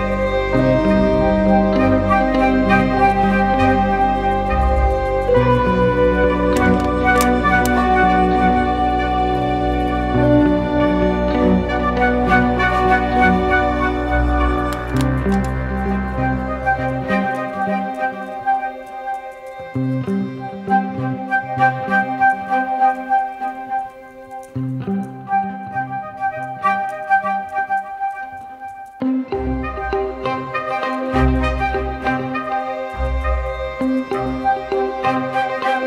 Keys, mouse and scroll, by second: 22.8 ctrl+t, 32.3 alt+shift+click.